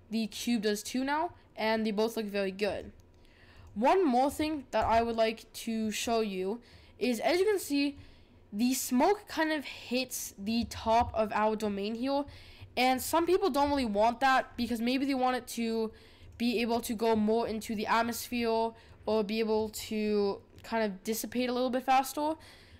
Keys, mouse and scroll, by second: 2.7 click, 4.9-6.0 right drag, 6.0-13.0 middle drag, 13.0 click, 16.5-17.7 drag, 17.7-22.7 middle drag.